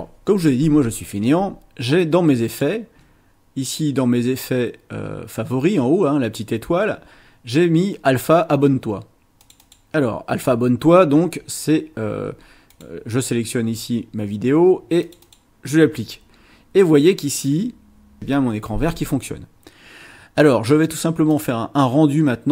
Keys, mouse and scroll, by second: 2.5 click, 9.4 click, 12.7 click, 15.0 click, 21.2 click.